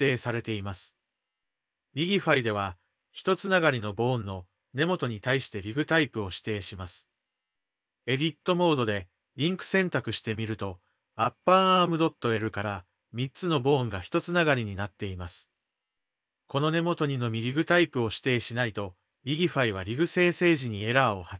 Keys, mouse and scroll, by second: 7.3 Tab, 8.5 click, 9.0 ctrl+l, 10.6 g, 16.6 click.